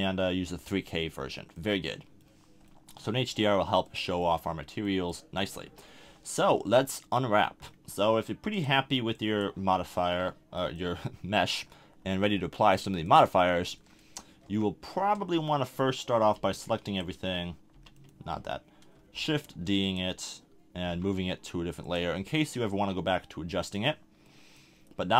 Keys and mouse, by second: 1.5 drag, 1.8-3.8 middle drag, 3.8-4.4 drag, 4.4-5.5 middle drag, 5.6 KP_1, 10.6-13.1 middle drag, 13.1-15.0 drag, 13.7 Tab, 14.4 a, 15.0 Tab, 16.3 b, 17.7 b, 19.5 shift+d, 19.9-21.2 drag, 20.8 m, 24.3-25.1 middle drag.